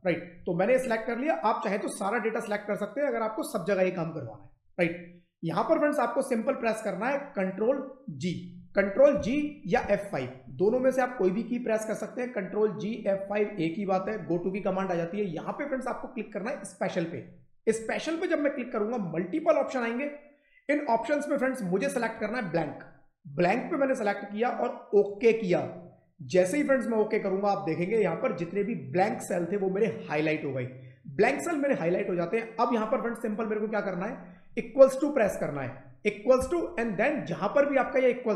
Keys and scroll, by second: 9.1 ctrl+g, 35.1 =.